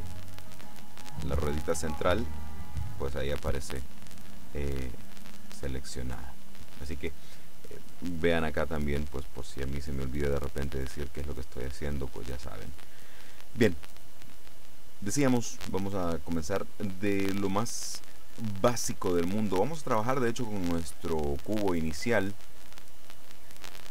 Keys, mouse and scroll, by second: 4.9 right click, 23.3-23.9 drag.